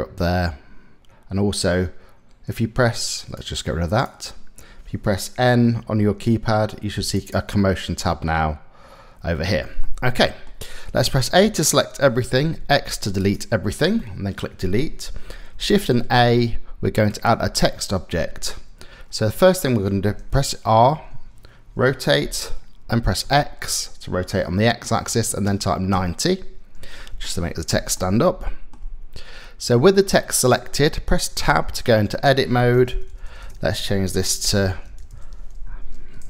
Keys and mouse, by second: 5.1 n, 5.5 n, 6.7 click, 9.5 middle click, 10.6 a, 12.0 x, 13.6 middle click, 14.1 click, 14.2 middle click, 15.1 shift+a, 20.7 r, 26.7 shift+middle click, 27.6 click, 28.0 middle click, 31.1 Tab, 32.4-35.9 typing.